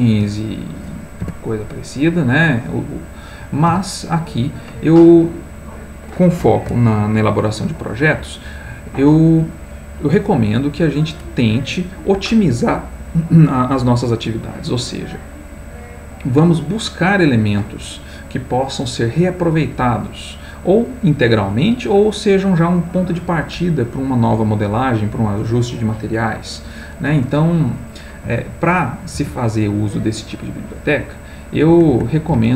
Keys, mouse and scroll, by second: 0.3 middle click, 1.4 Tab, 3.1 middle click, 3.9 x, 4.3-7.9 drag, 29.4 alt+Tab, 31.7 alt+Tab.